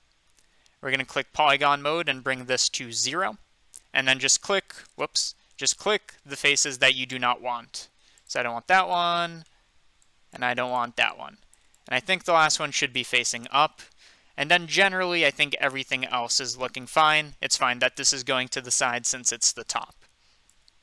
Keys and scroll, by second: 5.4 ctrl+z.